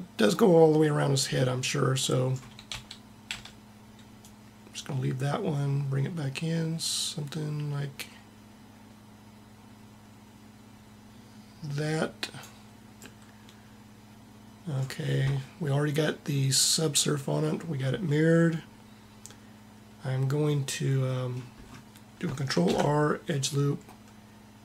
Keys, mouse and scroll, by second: 2.8 Tab, 3.4 a, 4.3 click, 22.7 ctrl+r.